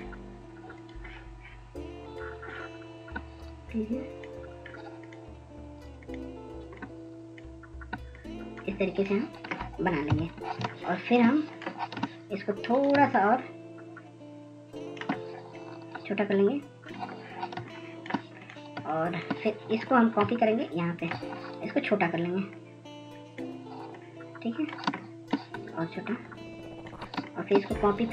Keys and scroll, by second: 13.7-14.7 ctrl+0, 15.5 ctrl+0.